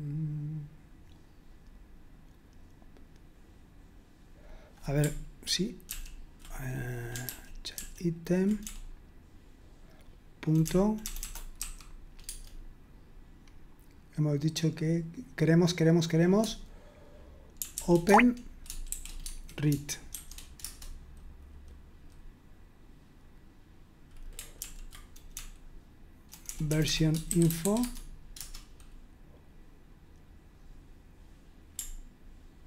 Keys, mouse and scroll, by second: 3.1-4.0 scroll down 1, 4.4-5.9 drag, 5.9 ctrl+p, 7.2 ctrl+p, 7.7 ctrl+p, 8.6 BackSpace, 9.3-11.5 BackSpace, 11.5 ., 12.2 Tab, 17.8-18.9 typing, 19.2 Tab, 20.1 shift+0, 20.6 Return, 24.6 ctrl+p, 25.3-28.1 typing, 28.3 Return.